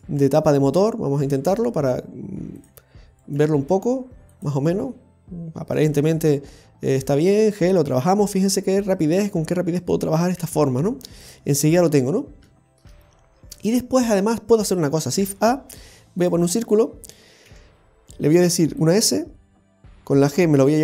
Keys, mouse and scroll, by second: 0.0 g, 1.3 right click, 1.5 g, 3.2 right click, 3.4 g, 6.1 scroll down 1, 6.9 right click, 7.9 g, 9.7 right click, 10.4 g, 12.2 scroll down 1, 12.5 shift+middle click, 13.0-13.6 scroll up 3, 13.6 shift+middle click, 15.1 shift+a, 17.4 s, 19.8 g.